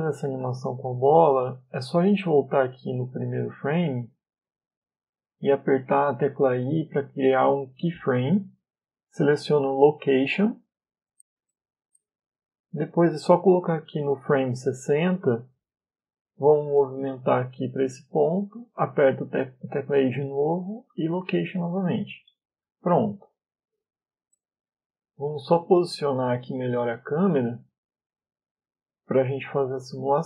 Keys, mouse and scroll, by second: 0.6 middle click, 6.3 i, 14.8 click, 16.5 ctrl+z, 17.6 click, 19.7 i, 22.9 click, 24.2 middle click, 25.5-25.9 scroll up 4, 26.3 scroll up 2, 28.0 KP_0, 29.6 KP_0.